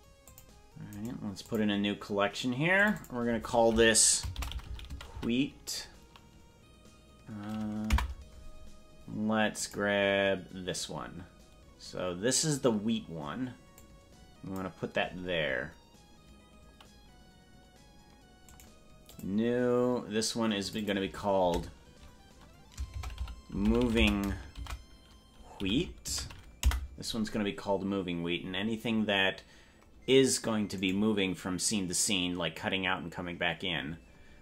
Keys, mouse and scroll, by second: 0.3 click, 1.0-2.4 right drag, 2.8 click, 3.1-8.7 drag, 9.8 right click, 13.8-15.1 drag, 18.6-20.0 right drag, 20.7 click, 20.9-27.5 drag, 31.1 right click.